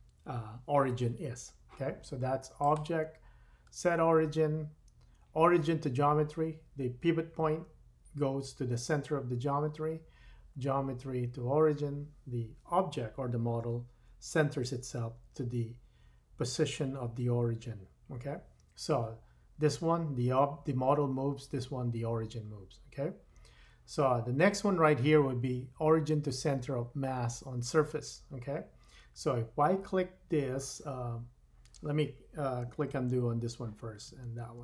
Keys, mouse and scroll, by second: 2.6 click, 5.7-34.6 drag, 33.0 super+z, 34.1 super+z, 34.5 super+z.